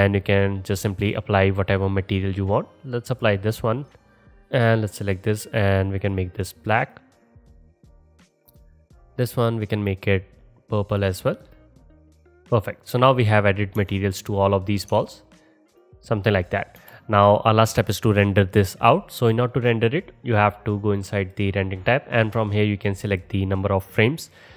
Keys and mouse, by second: 0.8-4.7 middle drag, 4.7-5.9 drag, 5.9-8.7 middle drag, 8.7-9.9 drag, 9.9-11.8 middle drag, 11.8-12.7 drag, 12.7-13.9 middle drag, 13.8 KP_0, 13.9 click, 14.2 middle click, 15.7 alt+middle click, 16.8 KP_0, 17.8-18.9 middle drag, 20.9 middle click, 21.3 middle click, 23.2-24.5 middle drag.